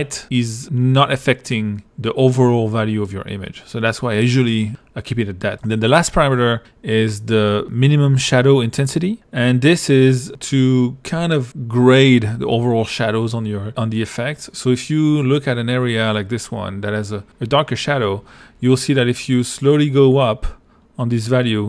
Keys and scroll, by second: 0.2 2.